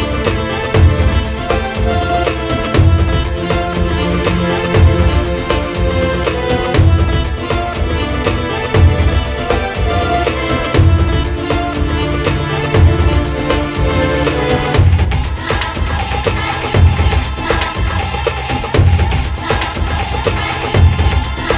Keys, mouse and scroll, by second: 0.3-2.6 drag, 3.0-3.9 drag, 3.3-3.7 scroll up 4, 3.5 middle click, 4.5 click, 6.1 click, 6.4-6.8 shift+middle drag, 6.8-7.3 scroll up 3, 7.3 middle click, 7.9-9.4 drag, 9.4 middle click, 10.0 middle click, 10.4 click, 11.3-14.3 shift+middle drag, 14.3 shift+a, 15.2 click, 15.6 click, 15.9 ctrl+shift+right click, 16.8 click, 18.6 click, 19.5-21.1 drag.